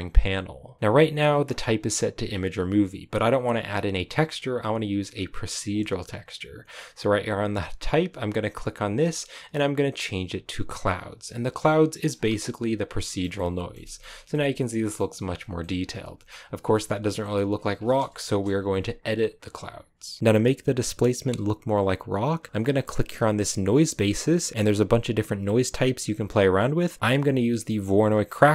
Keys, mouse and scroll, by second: 12.0 scroll down 3, 12.3-13.9 shift+middle drag, 13.9-14.2 scroll up 5, 14.2-15.3 middle drag, 15.3 scroll down 1, 15.5 middle click, 16.3-16.6 scroll up 2, 16.6 middle click, 17.4-18.2 scroll up 1, 18.2 KP_0, 20.2-28.5 drag.